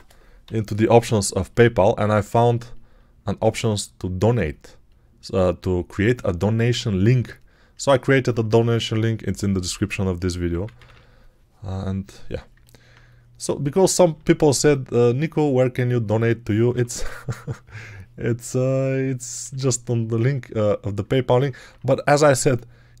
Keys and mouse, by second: 0.3 [, 0.8 [, 3.8-6.4 ctrl+drag, 7.1 alt+click, 7.7 alt+click, 10.4 p, 10.6 ], 10.8 ], 12.4 alt+click, 12.6 alt+click, 14.0 1, 16.6 3, 19.3 1.